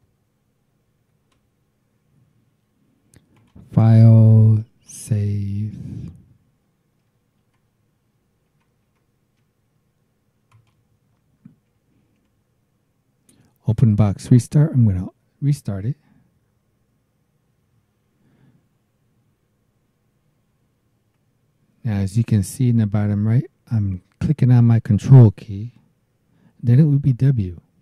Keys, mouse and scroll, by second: 0.9 shift+c, 3.3 click, 4.6 click, 7.4 alt+Tab, 8.5 alt+Tab, 10.5 click, 11.7 Up, 15.7 KP_Enter, 27.7 ctrl+w.